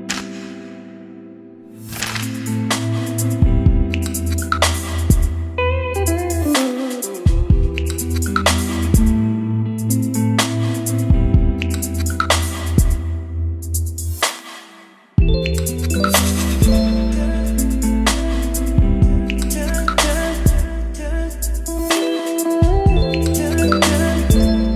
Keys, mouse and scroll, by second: 0.0 Return, 1.0 click, 1.5-17.1 typing, 4.1 click, 6.0 Return, 6.4 Return, 11.9 Return, 14.3 Return, 17.4 Return, 18.7-19.4 scroll, 19.1-20.1 typing, 21.5 click, 22.1 ctrl+c, 22.2 Right, 22.4 Return, 22.6 ctrl+v, 23.2 click, 24.0-24.7 typing.